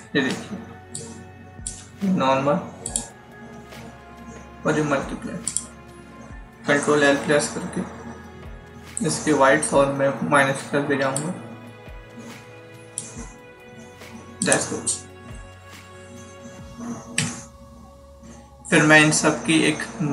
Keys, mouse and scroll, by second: 0.0-1.0 typing, 0.9 click, 2.7 click, 5.4 click, 7.1 ctrl+l, 11.1 click, 17.1 ctrl+0.